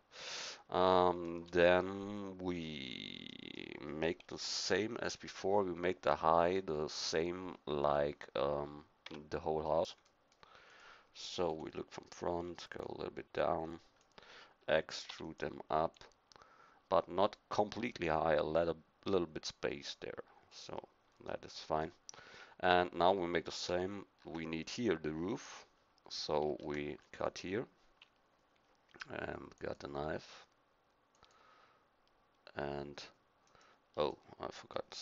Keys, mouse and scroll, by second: 4.2 KP_1, 9.0 Tab, 11.5 KP_1, 15.1 e, 15.9-18.3 drag, 21.6-26.5 middle drag, 26.5 ctrl+r, 29.6-33.5 drag, 34.1 click.